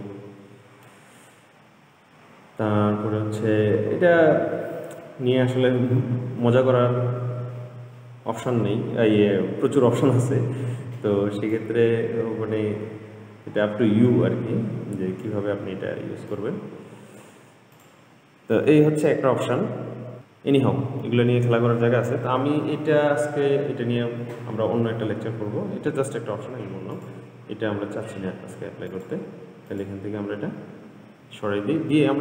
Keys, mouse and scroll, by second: 2.5-3.9 scroll down 3, 3.9-5.6 scroll down 8, 5.6-6.2 scroll up 1, 6.2-7.2 scroll up 4, 7.2-10.3 scroll up 1, 11.8-14.9 drag, 16.6-18.1 drag, 19.0-20.2 scroll down 2, 20.2 click, 23.5-26.3 scroll up 11, 27.2 click, 29.1 click, 29.9-32.2 drag.